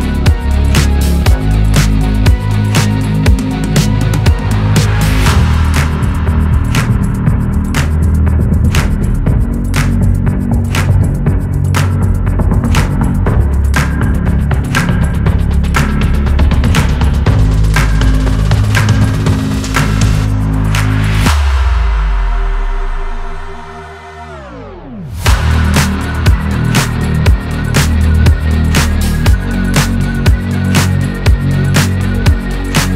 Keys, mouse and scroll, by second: 0.2-1.3 drag, 1.3-2.3 middle drag, 2.3 scroll down 1, 2.6 middle click, 3.3 KP_1, 3.5-3.9 scroll up 2, 3.9-5.8 shift+middle drag, 5.8-7.1 drag, 7.5 scroll down 1, 7.7 middle click, 8.0-9.2 right drag, 9.2 scroll up 2, 9.4-11.1 drag, 11.1 n, 11.5 click, 12.3 Tab, 12.5 middle click, 12.9 Tab, 13.2 click, 13.5 scroll down 1, 13.7 middle click, 14.1-14.6 scroll up 1, 14.6-16.8 drag, 17.2-18.2 drag, 18.2 scroll down 2, 18.3-19.6 middle drag, 20.1 KP_1, 20.5 scroll down 3, 21.0 middle click, 21.4 KP_1, 21.9 shift+middle click, 22.5 scroll up 2, 22.7 click, 23.2 n, 23.7 shift+middle click, 24.1-25.5 scroll up 1, 25.5 click, 25.8 scroll down 1, 26.1 middle click, 26.3 scroll up 1, 26.7-30.0 drag, 30.0-31.0 middle drag, 31.0-32.9 drag.